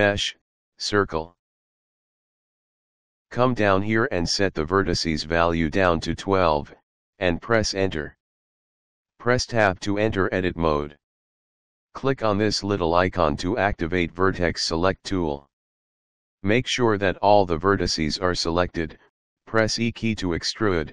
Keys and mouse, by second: 2.1 click, 4.1 click, 5.9 KP_1, 6.1 KP_2, 6.9 Return, 10.1 Tab, 12.8 click, 18.3 e, 19.0 s.